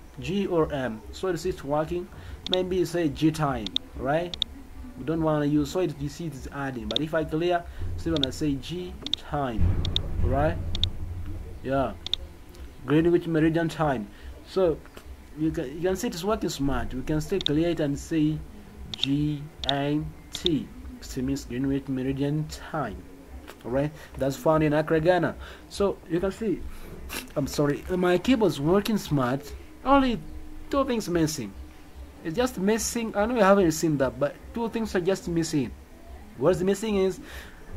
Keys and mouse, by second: 3.6 click, 4.3 click, 6.9 click, 8.1 click, 9.0 click, 9.8 click, 10.7 click, 12.0 click, 17.4 click, 18.9 click, 19.6 click, 20.3 click.